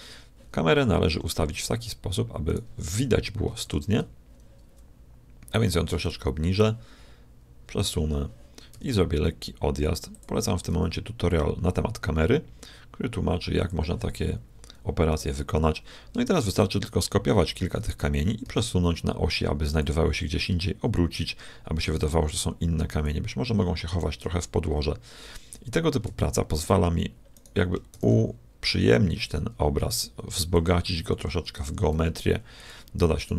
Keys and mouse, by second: 2.5 right click, 3.6 shift+f, 6.0-7.9 drag, 6.6 g, 8.7 g, 10.7 g, 15.1-17.0 right drag, 16.4 shift+d, 20.1 r, 23.0-25.0 drag, 25.1 click, 25.7 shift+middle click, 26.4 middle click, 27.3-29.4 right drag, 27.9 shift+d, 31.2 s, 31.6 r, 33.2-33.3 right drag.